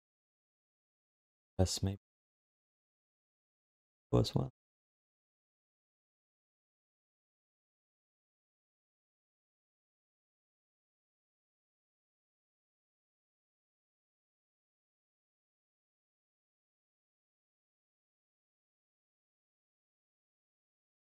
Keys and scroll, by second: 0.5 ctrl+s.